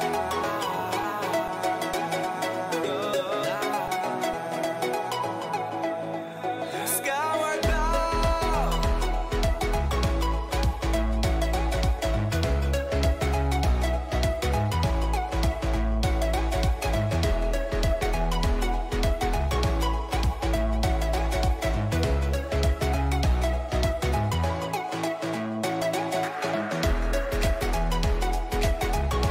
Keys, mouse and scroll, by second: 0.0-2.5 middle drag, 2.5 a, 3.1-5.1 middle drag, 6.8-13.5 middle drag, 14.1-17.4 middle drag, 18.6-23.6 middle drag, 21.5 a, 21.8 a, 25.8-27.6 drag, 27.2 b.